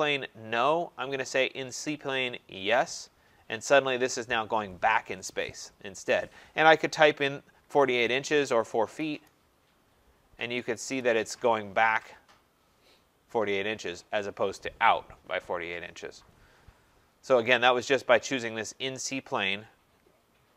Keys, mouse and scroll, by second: 2.7 click, 7.4-8.9 typing, 10.9 Return, 11.9-12.8 scroll, 19.1 click.